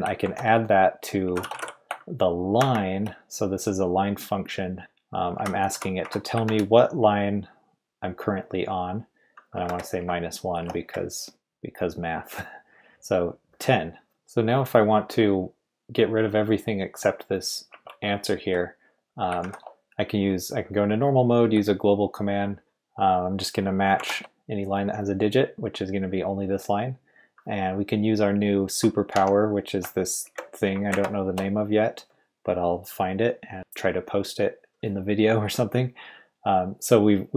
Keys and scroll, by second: 0.2-2.6 typing, 5.1-6.9 typing, 9.5 -, 10.0 =, 10.6 BackSpace, 10.8 1, 12.9 Return, 17.7 Escape, 19.4 shift+;, 21.4-24.7 typing, 29.1 typing, 30.2-30.9 typing.